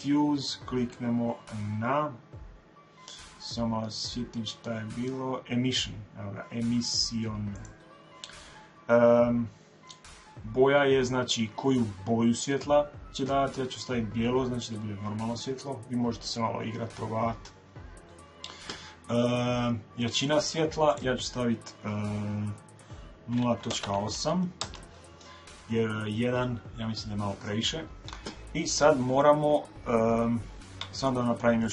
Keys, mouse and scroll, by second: 28.8-31.3 middle drag.